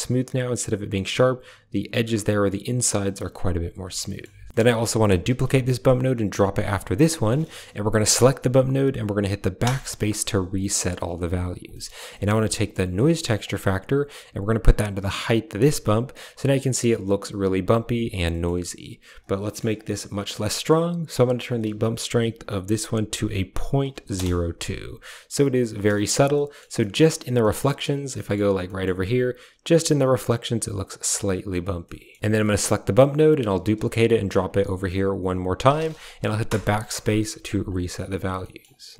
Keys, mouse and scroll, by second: 3.3 click, 4.0 middle click, 4.9 click, 5.1 shift+d, 6.8 click, 7.6 click, 9.5 BackSpace, 10.4 click, 11.6 click, 11.9 a, 12.0 middle drag, 13.3-15.1 drag, 18.1 middle click, 21.3-24.0 drag, 25.7 shift+middle drag, 26.3 shift+middle click, 26.7 shift+middle click, 27.3 shift+middle drag, 28.1 shift+middle click, 28.6 shift+middle click, 31.7 shift+middle drag, 32.2 g, 32.2 a, 32.4 click, 33.4 shift+d, 34.8 click, 36.3 BackSpace, 37.3 click.